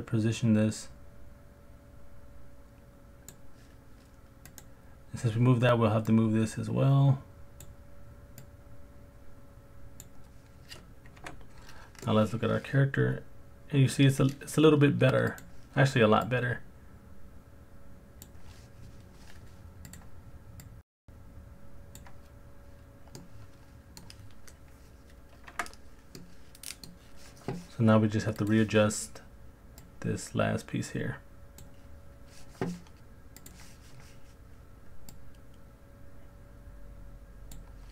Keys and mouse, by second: 4.5 click, 6.1 click, 11.2 KP_Decimal, 12.0-14.0 middle drag, 16.4 click, 19.9 click, 20.6 click, 23.2-24.0 middle drag, 25.5 Tab, 26.1 middle click, 33.4 click, 35.1 click.